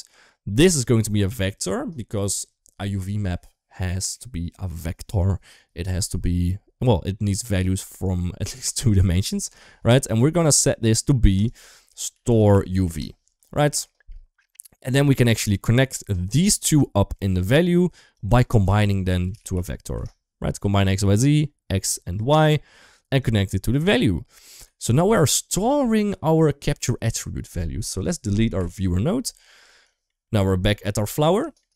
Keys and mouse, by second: 0.5-1.6 drag, 11.1-12.8 drag, 13.7 shift+middle click, 16.7 middle click, 17.9-20.7 drag, 21.1-21.9 drag, 23.0-23.6 drag, 25.1 ctrl+s, 28.5 Delete, 29.7 shift+middle click, 30.1 shift+middle drag, 30.9 middle click, 31.3 shift+middle drag, 31.5 middle click.